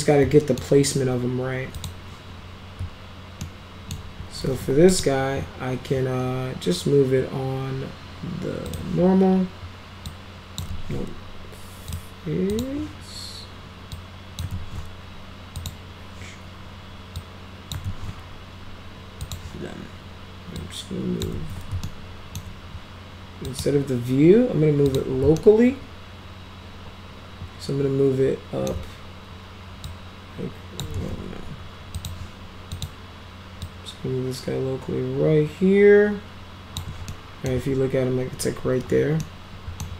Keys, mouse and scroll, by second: 1.8 click, 3.5 alt+middle click, 4.6 w, 4.9 click, 8.7 click, 10.1 click, 10.7 ctrl+z, 11.9 click, 12.5 click, 14.0 click, 14.5 ctrl+z, 15.6 click, 17.2 click, 17.8 ctrl+z, 19.3 click, 20.6 click, 21.4 ctrl+z, 21.9 alt+middle click, 23.5 click, 24.9 click, 25.4-28.7 alt+middle drag, 29.9 click, 31.0 ctrl+z, 32.0 click, 32.8 click, 33.7-36.8 drag, 37.1-37.5 middle drag, 39.2 middle click.